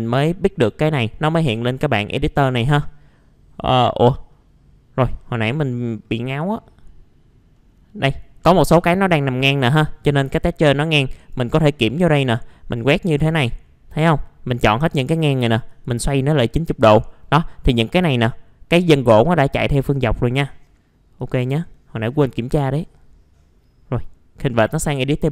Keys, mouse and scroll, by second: 2.1 middle click, 2.5-2.9 scroll down 1, 4.3 middle click, 5.6 scroll up 1, 6.0 scroll down 1, 6.2 middle click, 7.0-7.5 scroll up 1, 7.5 middle click, 11.1-13.4 drag, 20.4 scroll down 1, 20.7 middle click, 21.2 right click, 22.0 middle click, 22.2-22.6 scroll down 1, 22.6 right click, 24.5 click.